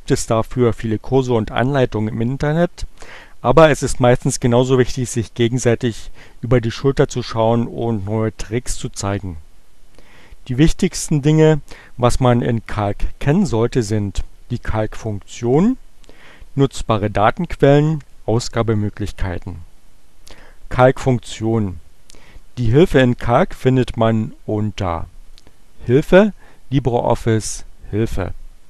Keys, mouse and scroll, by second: 25.3 click, 26.3-27.5 drag.